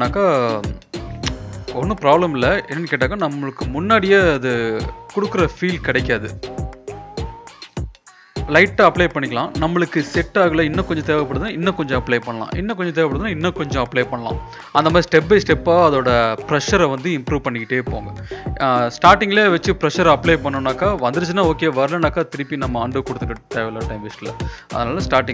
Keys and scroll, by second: 1.2 ctrl+-, 1.5-2.1 typing, 3.7 ], 3.8 ], 3.8 ], 4.0 ], 6.0 [, 6.2 [, 6.3 [, 6.4 [, 7.5 ], 7.7 ], 7.9 ], 9.7-11.1 typing, 11.8 ctrl+=, 14.2-15.6 typing, 17.6 ctrl+z, 17.8 ctrl+z, 18.0 ctrl+z, 18.5 ctrl+z, 19.0 ctrl+z, 19.6 ctrl+z, 21.0 ctrl+z, 23.9 ctrl+z.